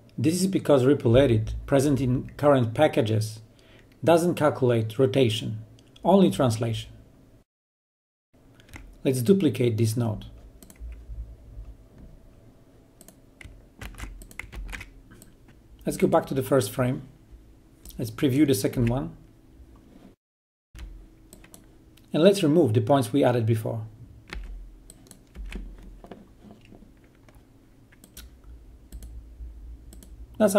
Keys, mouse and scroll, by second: 8.3 click, 10.0 click, 11.6 c, 12.0 click, 12.3 ctrl+v, 12.9-13.6 drag, 16.9 click, 19.6 1, 21.6 click, 23.8 Delete, 24.5 click, 27.4 Delete, 28.0 click, 28.5 Delete.